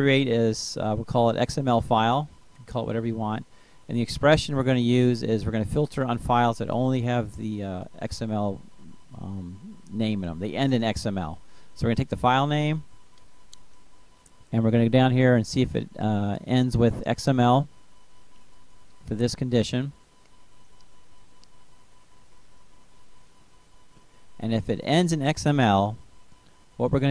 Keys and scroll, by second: 6.3-9.2 typing, 11.2 ctrl+space, 12.2 Down, 14.2 Up, 15.9 Return, 17.6-21.6 typing, 25.0 Left, 26.3 ', 26.5 Right.